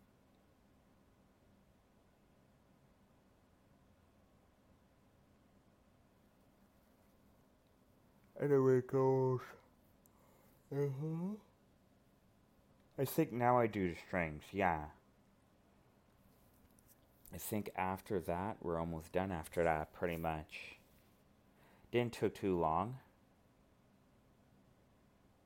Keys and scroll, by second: 5.5 alt+space, 7.4 alt+space, 9.0 alt+space, 15.3 alt+space, 23.8 ctrl+z, 25.2 alt+space.